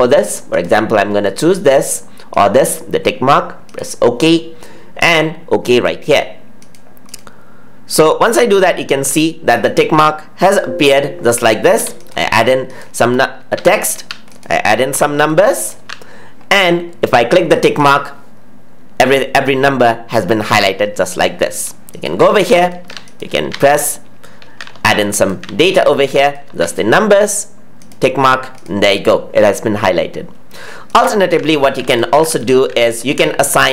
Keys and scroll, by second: 10.3 ctrl+z.